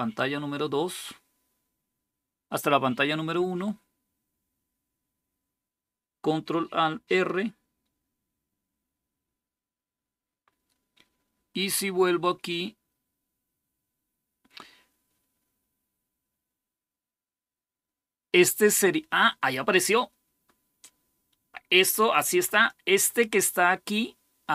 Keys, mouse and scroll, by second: 22.2-24.5 drag.